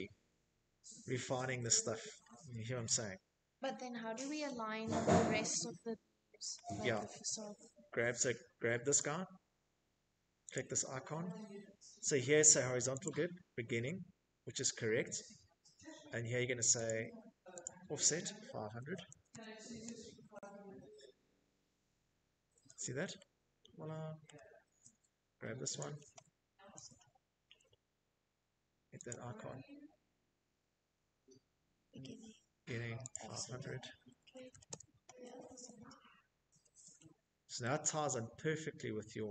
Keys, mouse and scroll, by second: 1.5 middle click, 1.6 middle click, 3.1 middle click, 4.6 shift+middle click, 5.5 middle click, 5.5 middle click, 6.6 click, 8.2 click, 9.7 middle click, 10.7 click, 14.5 click, 15.3 click, 16.5-17.9 typing, 19.3 0, 21.9 shift+middle click, 22.4 middle click, 22.4-25.6 shift+middle click, 22.6 Escape, 23.4 click, 25.2 middle click, 25.3 middle click, 25.3 shift+middle click, 25.5 middle click, 26.7 click, 28.6 middle click, 28.6 middle click, 30.7 click, 31.5-32.9 typing, 34.1 Escape, 34.9-36.0 typing, 38.4 middle click, 38.4 shift+middle click, 38.5-39.3 scroll.